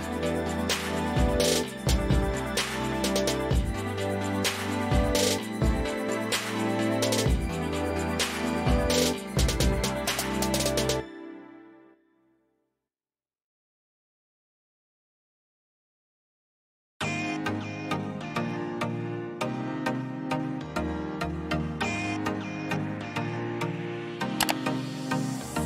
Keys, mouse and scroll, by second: 3.6 click, 7.4 click, 8.1 click, 8.3 click, 9.5 click, 9.7 Right, 14.7 click, 16.7 click, 17.9 click, 18.5 ctrl+c, 18.7 ctrl+v.